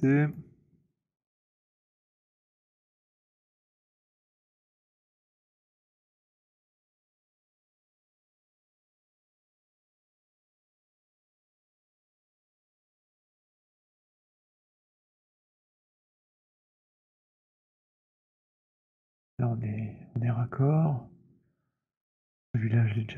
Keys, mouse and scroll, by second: 0.3 click, 2.8-5.5 c, 5.5 middle click, 5.7-6.9 scroll, 7.0 alt+middle click, 7.2 alt+middle click, 8.5 click, 9.2 alt+middle click, 11.0 alt+middle click, 12.8 right click, 14.5 click, 16.0-17.7 c, 18.4 middle click, 18.4 c, 19.3 click, 20.9 middle click, 22.2 alt+middle click.